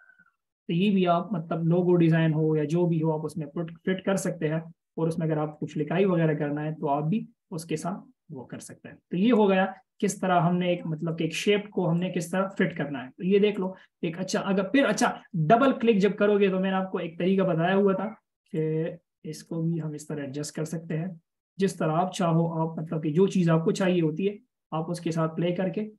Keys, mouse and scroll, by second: 1.0 double click, 3.6-4.4 scroll up 1, 4.8 alt+shift+click, 6.6 double click, 12.2 alt+shift+click, 13.2-15.3 scroll up 1, 15.8 double click.